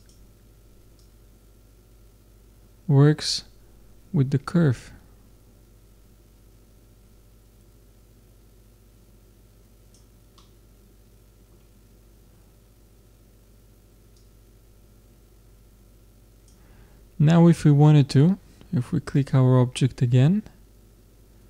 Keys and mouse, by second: 0.0-2.8 drag, 10.3-12.2 middle drag, 12.3 middle click, 14.2-15.4 drag, 19.2-21.0 drag.